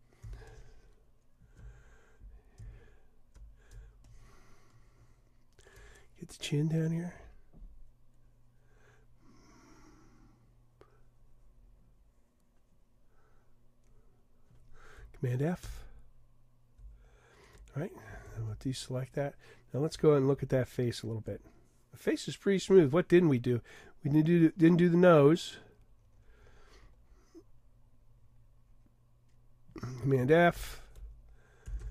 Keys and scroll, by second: 15.7 super+f, 18.3 super+d, 20.3 super+-, 30.6 super+f, 31.8 super+d.